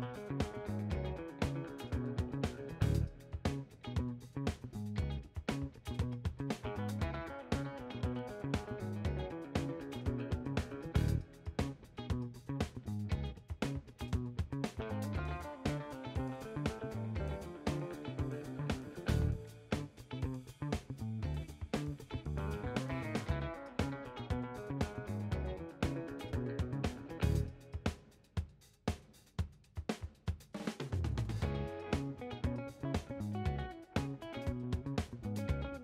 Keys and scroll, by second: 0.0-6.8 typing, 0.9 Left, 5.2 Left, 5.9 Right, 6.1 Left, 10.7 7, 10.8 Return.